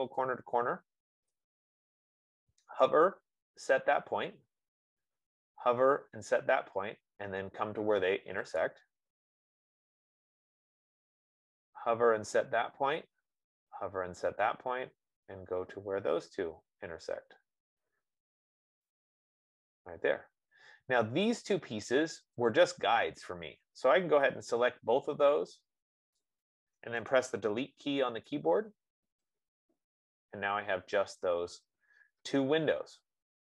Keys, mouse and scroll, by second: 9.0-14.0 drag, 16.5 F15, 19.1 click, 22.0 click, 22.8 click, 26.5 click, 28.5 BackSpace.